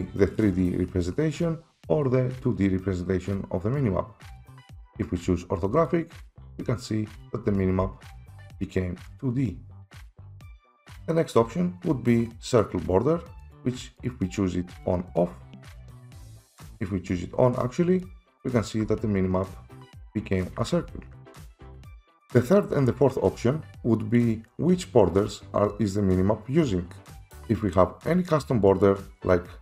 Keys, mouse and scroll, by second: 4.4 click, 5.7 right click, 5.8 right click, 6.6 right click, 7.3 right click, 7.5-11.5 typing, 10.6 click, 13.6 click, 14.0 click, 14.8 click, 15.2 click, 15.8 click, 16.5 click, 16.8 click, 18.0 right click, 18.7 right click, 19.1-21.3 typing, 21.9 click, 22.2 Escape, 28.8 click.